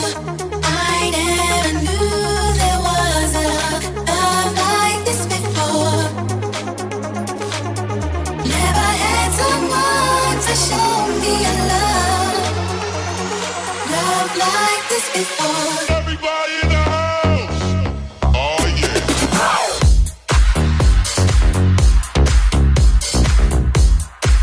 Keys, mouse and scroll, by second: 3.5 middle click, 3.5 right click, 5.0 g, 6.0-9.7 alt+middle drag, 6.4 alt+z, 6.6 g, 9.7 right click, 10.2-16.1 middle drag, 10.2 g, 12.6 shift+g, 16.1 right click, 16.2-22.0 middle drag, 16.6 g, 22.0 right click, 22.0-24.4 ctrl+middle drag.